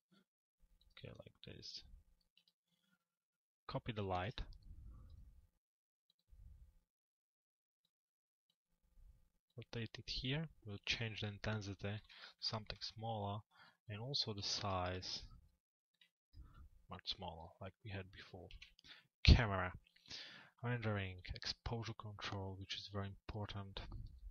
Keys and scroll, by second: 18.1 c.